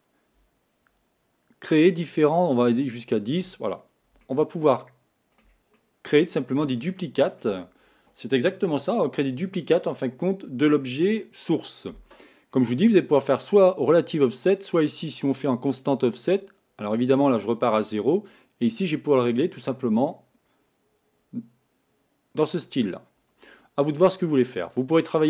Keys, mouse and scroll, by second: 2.1-3.3 drag, 4.3-5.6 shift+middle drag, 5.6 scroll up 1, 5.8 middle click, 6.7 shift+scroll down 1, 6.9 shift+scroll up 1, 6.9-9.9 shift+middle drag, 15.5 click, 16.3 click, 18.3-21.4 drag, 24.8 click.